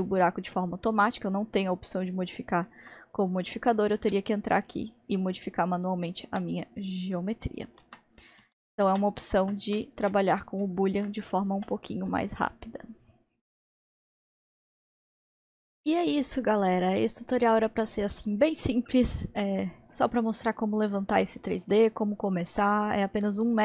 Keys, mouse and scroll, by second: 0.0-0.7 scroll up 3, 2.7-3.6 middle drag, 3.6 click, 4.0 Tab, 6.3 Tab, 6.3 Tab, 6.8-7.1 scroll down 2, 7.1-8.4 middle drag, 8.4 ctrl+z, 8.5 ctrl+z, 9.1 ctrl+z, 9.6 ctrl+z, 10.3 scroll down 2, 10.6 middle click, 11.0 click, 11.6 Delete, 15.0 n, 15.3-19.1 middle drag, 22.7-23.6 middle drag.